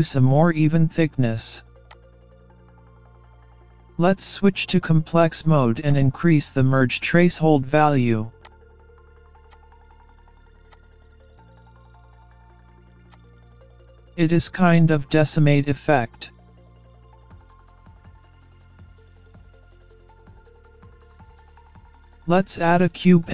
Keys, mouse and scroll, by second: 1.9 click, 4.9 click, 8.5 click, 10.7 click, 11.0-11.3 scroll up 1, 11.3 middle click, 13.1 click, 22.8 shift+a.